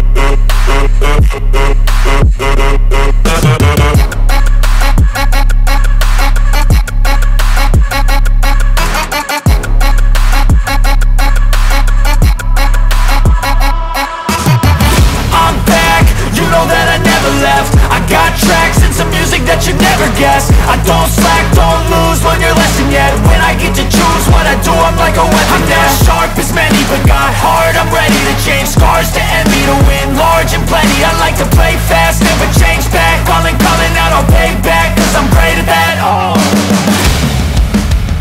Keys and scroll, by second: 3.5 Return, 6.9 ctrl+t, 14.0 Return, 24.1 ctrl+t, 31.8 Return.